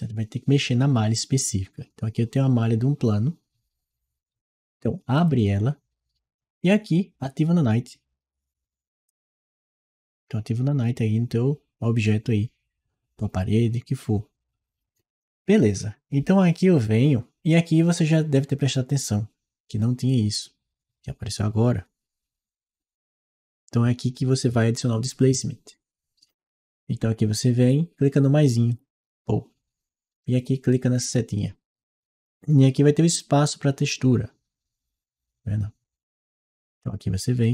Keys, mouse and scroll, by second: 5.0 click, 6.8-7.5 drag, 8.9 click, 9.7-11.2 drag, 11.8 click, 28.5 click, 31.1 click, 37.2-37.5 drag.